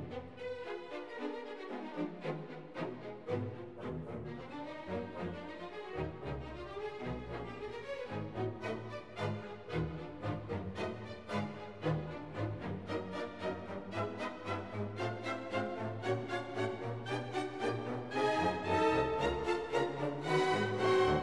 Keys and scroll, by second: 15.7 alt+q, 20.2 1, 21.0 1.